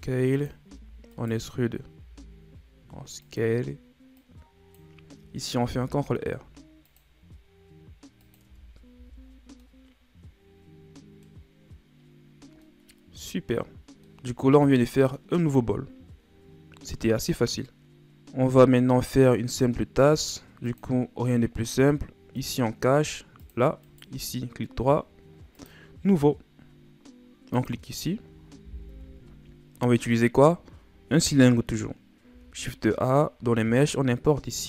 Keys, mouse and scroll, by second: 4.1-5.7 drag, 5.7 ctrl+r, 8.4 Tab, 8.9 a, 9.2 scroll down 4, 9.6-12.3 middle drag, 12.3 scroll down 2, 12.6-17.0 middle drag, 18.3-20.7 scroll down 3, 20.7 click, 22.3 click, 23.4 click, 23.8 right click, 25.6-26.2 right drag, 26.2 scroll down 7, 27.5 click, 28.9 KP_1, 32.3 shift+a.